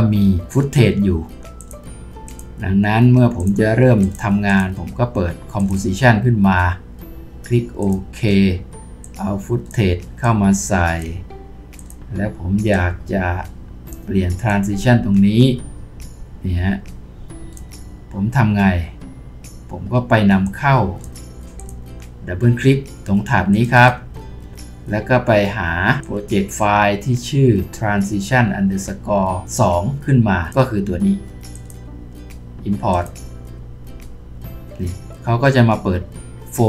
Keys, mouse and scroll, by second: 23.7 double click.